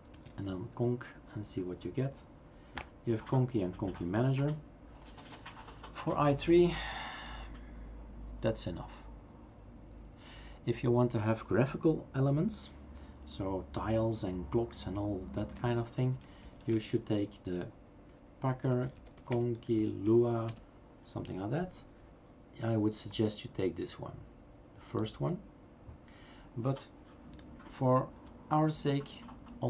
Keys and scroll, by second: 0.0-1.2 typing, 1.5 Tab, 14.0-17.2 typing, 18.4-22.0 typing, 28.1 ctrl+c.